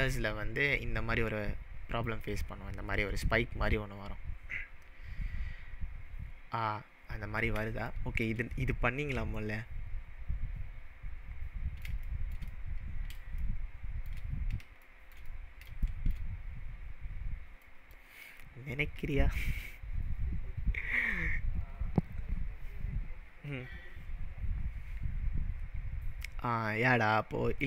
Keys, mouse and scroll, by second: 0.9-2.1 scroll up 8, 2.1 click, 5.3-7.5 scroll down 10, 7.5 scroll down 1, 8.0-8.4 shift+middle drag, 14.4-14.8 scroll down 3, 14.9-16.1 shift+middle drag, 18.4-18.9 scroll up 2, 19.2-19.7 shift+middle drag, 27.6 click.